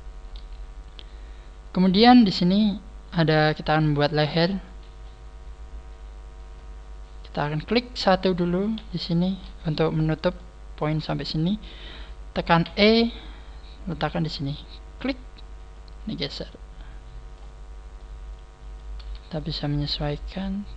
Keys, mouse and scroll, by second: 3.7 middle click, 4.6 middle click, 5.3 scroll down 3, 6.7 scroll up 5, 7.3 right click, 7.3 scroll up 1, 8.7 KP_3, 10.3 shift+middle click, 12.6 e, 17.2 click, 17.9 middle click, 19.3 shift+middle click, 20.1 shift+middle click.